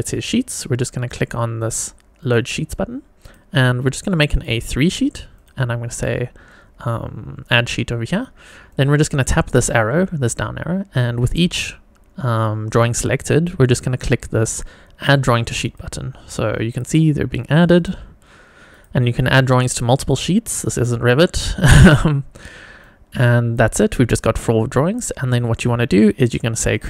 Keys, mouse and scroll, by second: 2.2 click, 3.2-4.4 drag, 5.3 click, 8.7 click, 11.1-13.9 drag, 15.6 click, 16.7 click, 17.7 click, 18.7 click, 19.6 click, 20.8 click, 21.8 click, 22.8 click, 26.7 click.